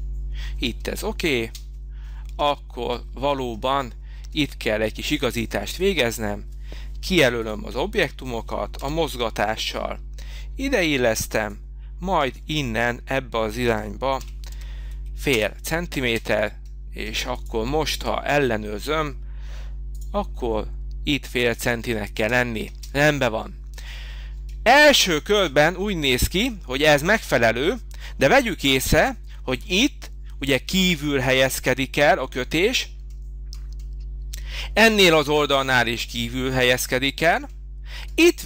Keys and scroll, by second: 0.7 Escape, 1.3 space, 8.8 m, 13.6 0, 14.1 Up, 14.5 5, 15.3 Return, 16.0 space, 22.1 Escape, 22.6 space.